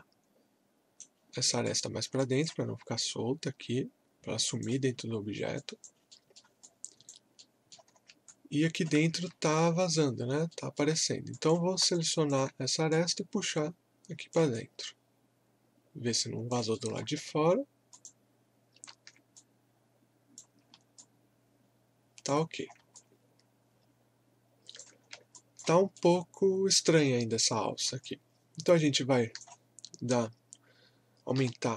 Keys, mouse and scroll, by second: 1.7 click, 2.2-5.1 alt+drag, 5.1 alt+scroll down 1, 5.6 alt+click, 6.1 alt+middle click, 6.6 alt+click, 7.4 alt+middle click, 7.9 scroll up 1, 8.3 alt+click, 9.2 alt+middle click, 9.7-10.3 scroll up 1, 10.5 alt+middle click, 11.3 click, 11.9-14.6 alt+drag, 14.6-16.8 alt+drag, 16.8 alt+middle click, 17.2 scroll up 1, 17.9 click, 19.3 click, 20.6 scroll down 1, 21.0 click, 21.0-22.5 alt+drag, 22.5 scroll down 1, 23.0-25.0 alt+drag, 25.0 scroll down 1, 25.3 alt+click, 25.9 right click, 26.0-27.6 right drag, 27.6 scroll up 1, 28.0-31.3 alt+drag, 31.3 r.